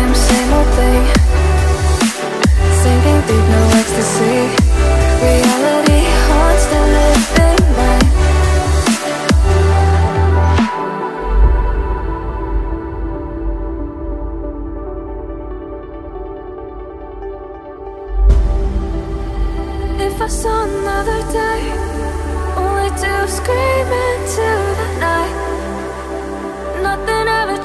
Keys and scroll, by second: 8.4 ctrl+z, 8.4 ctrl+z, 8.5 ctrl+z, 10.9 ctrl+z, 11.0 ctrl+z, 11.8 ctrl+z, 13.7 ctrl+z, 19.0 ctrl+z.